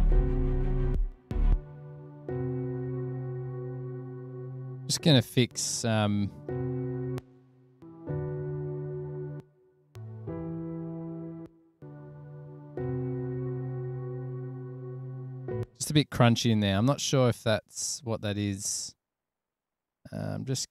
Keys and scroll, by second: 1.8 super+s, 6.3 super+], 6.4 super+], 8.0 space, 9.6 space, 10.1 space.